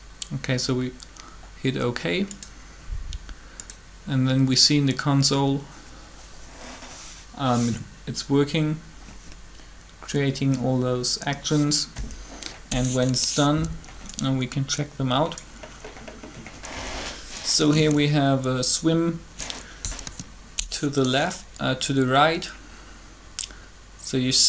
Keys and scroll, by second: 20.0 7.